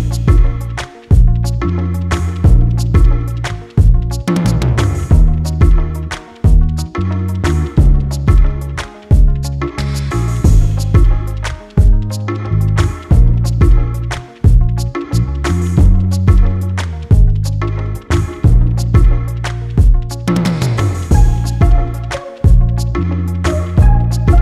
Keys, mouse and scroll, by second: 1.4 right click, 2.3 click, 3.5 scroll down 1, 4.2 click, 5.4 right click, 6.2 click, 7.2 click, 8.7 Delete, 9.0-9.4 scroll down 1, 9.4 click, 10.8 ctrl+g, 11.3 click, 16.3 scroll down 1, 16.5 scroll up 1, 17.5 click, 18.3-18.9 scroll down 1, 19.1 click, 22.5 click, 23.6 click.